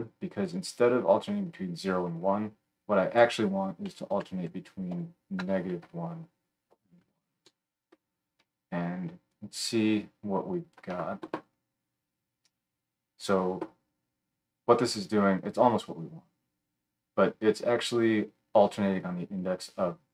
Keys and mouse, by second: 0.6-3.1 middle drag, 3.1-20.1 drag.